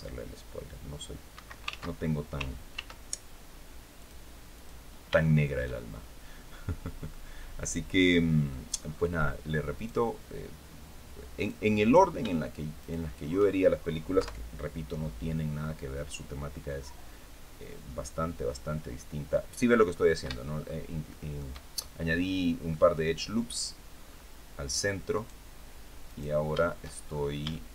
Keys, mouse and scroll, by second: 0.6 scroll up 2, 1.0 Escape, 1.4 ctrl+z, 2.4 ctrl+r, 3.0 ctrl+scroll up 3, 3.6 click, 4.2 click, 4.9 shift+middle click, 6.7-8.3 drag, 8.4-8.9 scroll up 1, 9.4 right click, 11.0 right click, 12.5 shift+right click, 13.8 KP_3, 14.6-15.0 scroll down 2, 16.5-18.4 drag, 19.6 scroll up 2, 20.1 shift+middle click, 20.7 shift+middle click, 22.4 middle click, 23.7 scroll up 2, 24.8 right click, 25.7 right click, 26.7 shift+scroll up 1, 27.2-27.7 shift+middle drag.